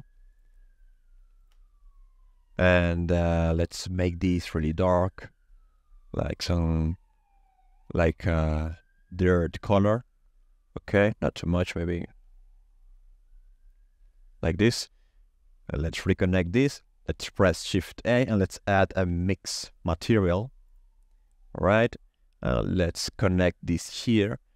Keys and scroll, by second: 17.5 shift+a, 18.9 i, 19.1 x.